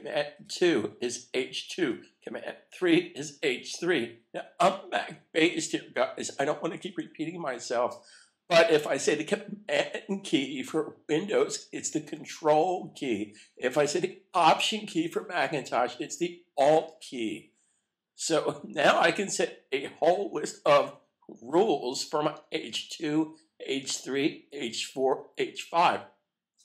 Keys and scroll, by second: 0.4 super+2, 2.7 super+3.